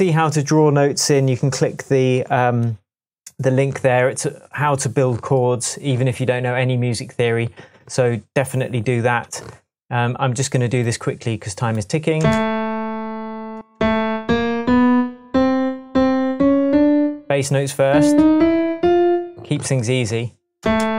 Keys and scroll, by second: 12.2 space, 13.5 space.